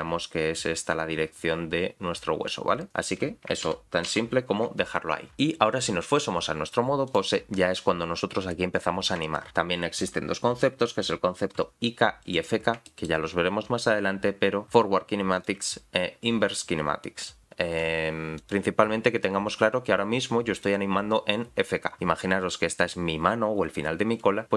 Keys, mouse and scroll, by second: 0.0-2.2 drag, 2.5 click, 3.6 ctrl+z, 5.3 click, 7.1 click, 9.3 shift+middle click, 10.7-11.2 scroll up 2, 11.4 r, 12.8 shift+middle click, 13.3-14.2 scroll down 1, 14.3 r, 15.3 click, 17.7 r, 20.5 click.